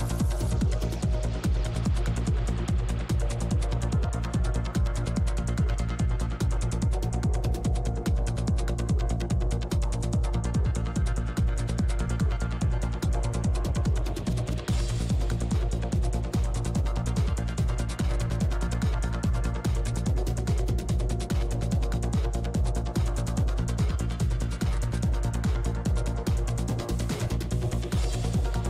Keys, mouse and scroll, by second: 2.0-6.9 drag, 6.9 middle click, 7.2-10.2 drag, 10.2-11.6 middle drag, 10.7 click, 11.9-15.6 middle drag, 12.4-16.3 drag, 15.7 f, 16.0 middle click, 16.6 f, 16.9 click, 20.3 click, 20.5 f, 21.2 f, 22.0 click, 22.0 middle click, 22.9 middle click, 23.4 click, 24.0-25.0 middle drag, 24.4-25.4 drag, 25.4 middle click, 26.1-27.9 drag, 26.8-28.1 middle drag.